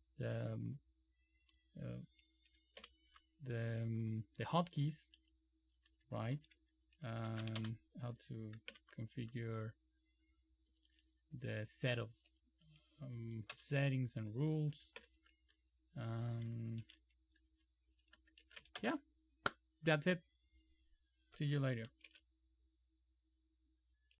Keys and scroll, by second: 2.9 ctrl+super+w, 7.4 shift+;, 8.8 ctrl+super+e, 10.8 Down, 11.0 Down, 11.2 Down, 11.5 Down, 12.7 Up, 13.3 Up, 13.6 Return, 15.1 ctrl+super+o, 16.1 Down, 16.9 shift+g, 18.7 q, 18.9 Return, 22.2 super+c.